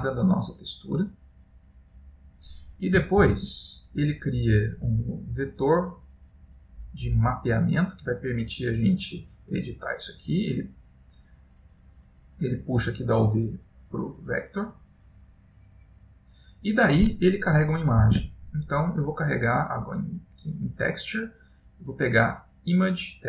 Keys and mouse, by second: 3.1-3.6 typing, 11.4 middle click, 12.6 click, 15.5 click, 18.1 shift+a.